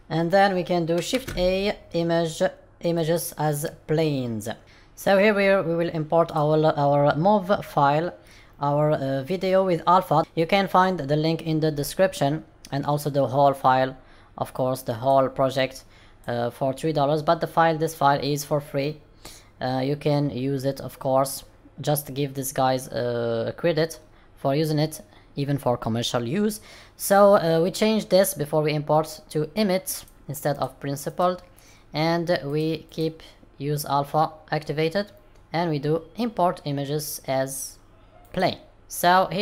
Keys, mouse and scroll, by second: 38.9 middle click.